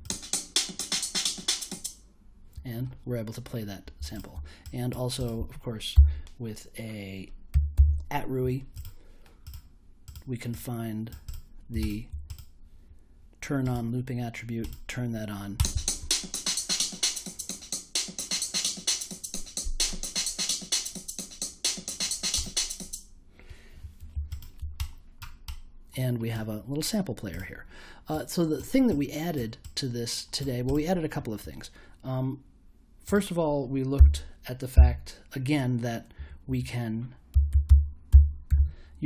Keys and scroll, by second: 5.9 n, 7.5 a, 7.7 t, 33.9 n, 34.7 m, 36.1-39.0 typing.